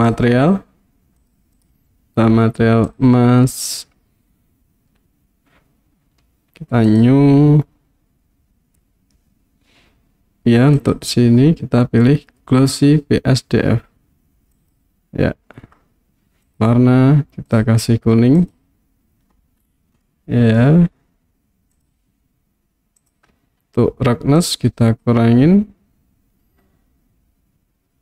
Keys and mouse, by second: 0.3 click, 1.2 click, 7.2 click, 10.8-14.8 drag, 16.5 click, 20.1-20.6 middle drag, 21.8 click, 24.5-28.0 drag.